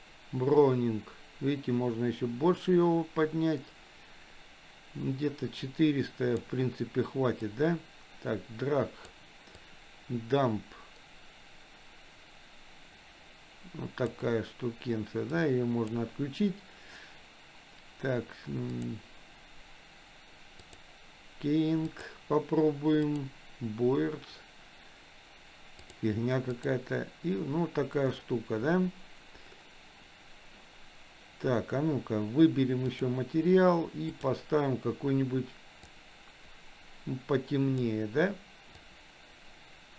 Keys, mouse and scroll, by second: 7.5-9.1 drag, 9.5-14.0 drag, 15.3 click, 18.7-20.8 drag, 21.9-23.5 drag, 26.0-26.8 drag, 32.8 click, 34.1 click.